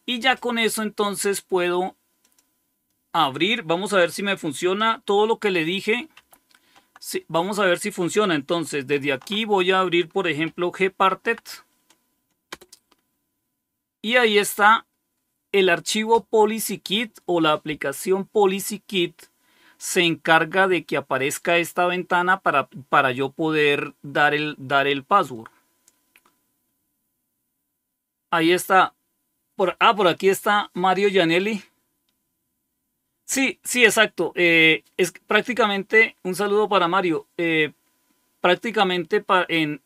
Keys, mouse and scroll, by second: 2.1 click, 6.1 super+7, 8.9 alt+super+d, 10.1-11.7 typing, 12.4 Return.